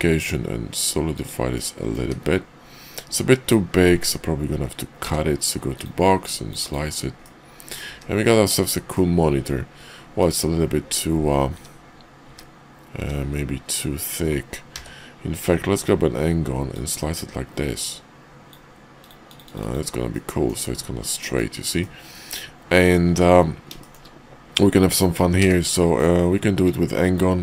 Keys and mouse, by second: 1.5 click, 4.9 d, 6.2 click, 7.2 middle click, 7.9 `, 8.8-10.2 middle drag, 10.7 `, 11.4 `, 12.2 `, 12.9 `, 14.7 d, 16.7-18.5 drag, 19.6 click, 20.1 middle click, 21.1 middle click, 21.8-22.9 middle drag, 23.8 shift+middle click, 25.3 d, 26.6-27.1 drag.